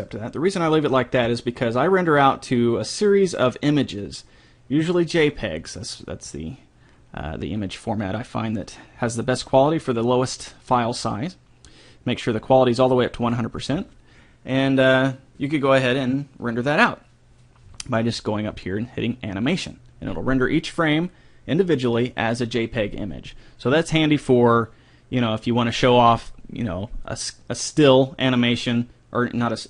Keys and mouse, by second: 1.8-4.9 middle drag, 12.4-14.1 drag.